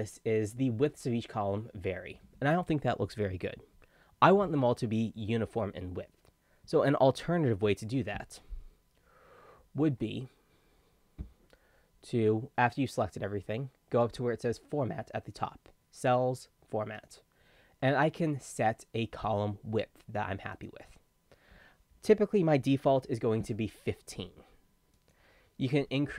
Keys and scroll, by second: 7.7 ctrl+z, 9.8 ctrl+z, 22.7-23.6 typing.